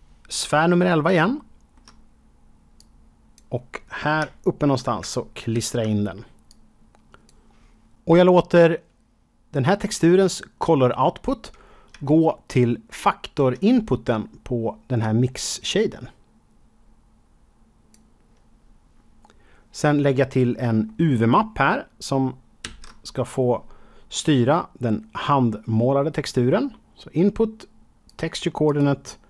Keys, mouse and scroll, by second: 1.1 shift+middle click, 2.7 click, 4.3 shift+middle click, 5.5 ctrl+v, 6.4 click, 10.4 scroll up 2, 11.0-11.5 scroll down 3, 12.0 shift+middle click, 12.8 shift+double middle click, 15.0 click, 20.8 shift+middle click, 22.6 shift+a, 28.0 click, 28.6 click.